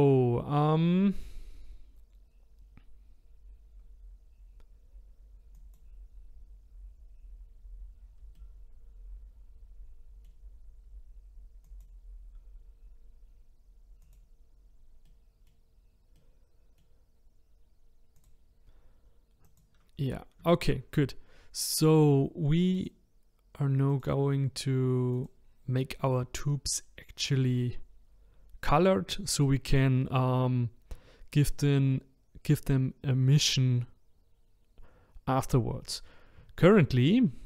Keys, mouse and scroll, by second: 5.6 click, 8.3-11.5 middle drag, 11.6-15.1 drag, 15.1-15.6 middle drag, 15.6-16.1 scroll up 2, 16.1-18.1 middle drag, 18.1-19.6 drag, 20.1-20.5 scroll down 3, 20.5-22.8 shift+middle drag, 22.8 click, 24.0 click, 25.1 click.